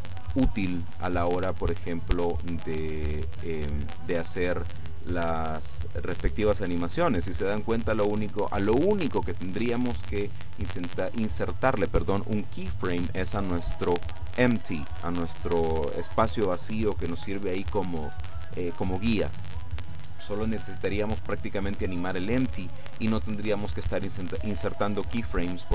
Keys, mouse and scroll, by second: 1.1-1.6 scroll down 2, 1.6 middle click, 2.9-3.7 scroll up 2, 25.4-25.7 right drag.